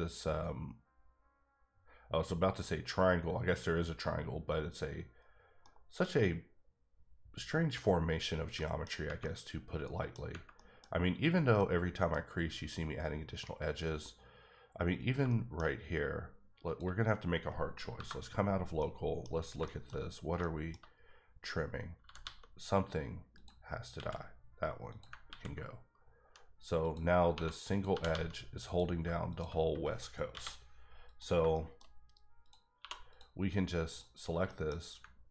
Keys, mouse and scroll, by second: 5.6 middle click, 8.0 scroll down 2, 8.6 shift+middle click, 9.4 middle click, 10.2 scroll up 1, 10.5 middle click, 10.9-11.3 scroll up 1, 11.3 scroll down 1, 11.6 middle click, 12.4 scroll up 1, 13.0-14.9 scroll down 1, 15.2 shift+scroll down 1, 15.3 shift+middle click, 15.6-16.6 scroll up 2, 16.6 click, 17.0 scroll down 1, 18.8 middle click, 19.3-20.0 scroll up 4, 19.6 shift+middle click, 20.4 middle click, 22.0 g, 22.2 g, 23.3 click, 23.9 ctrl+x, 24.9 click, 25.3 ctrl+x, 26.8 click, 27.3 1, 27.7 click, 27.9 g, 28.1 g, 28.6 click, 30.3 m, 31.0 click, 31.5 shift+middle click, 32.4 click, 32.8 2, 33.1 click, 33.9 click, 34.1 scroll down 2, 34.4 middle click, 34.8-35.1 scroll up 2.